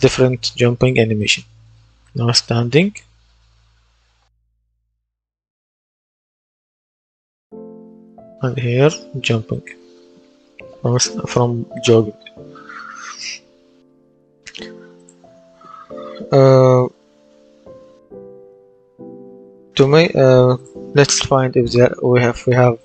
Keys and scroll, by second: 1.5 space, 2.6 space, 3.8 space, 6.7 w, 8.0 space, 10.2 Escape, 21.6-22.8 typing.